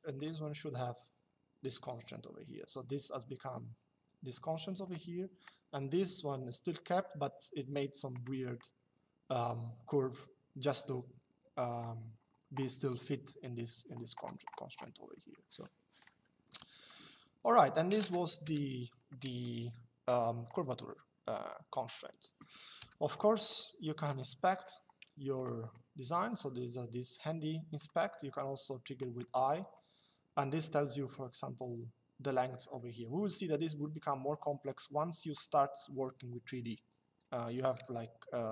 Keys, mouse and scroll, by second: 14.9 middle click, 16.1 Escape, 16.6 click, 18.2 Delete, 18.8 middle click, 23.4 Escape, 25.1 click, 27.5 click, 28.9 middle click.